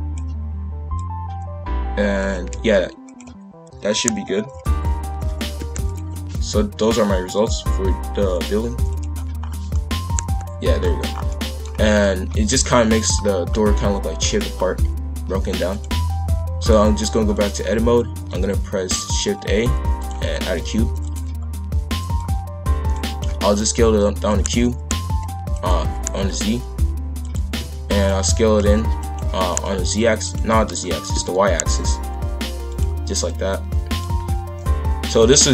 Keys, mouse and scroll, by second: 0.9 click, 2.5 z, 3.8 shift+f, 7.3 click, 8.3-9.4 drag, 9.4-9.7 scroll down 2, 9.7-10.8 middle drag, 10.8-11.3 scroll down 4, 11.3-11.6 middle drag, 11.6-12.0 scroll up 1, 12.0-12.6 middle drag, 12.6-13.1 scroll up 1, 13.2 scroll up 2, 13.5-14.5 middle drag, 14.5-15.1 scroll up 1, 15.7 click, 16.6-18.3 drag, 18.3 shift+a, 20.4 shift+f, 22.1 click, 23.2 s, 24.8 s, 27.4 shift+f, 28.4 s, 29.2 s, 33.2 click, 35.2-35.5 drag.